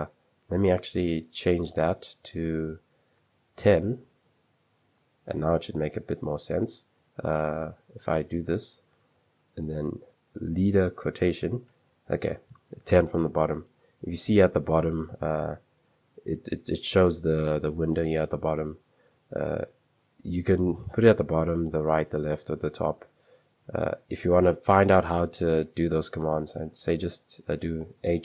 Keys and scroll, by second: 0.0 Escape, 1.1 super+2, 2.1-4.7 typing, 4.7 super+3, 7.8 typing, 10.8 typing, 23.0 Escape, 24.2 ;, 25.1 h, 26.2-27.6 typing.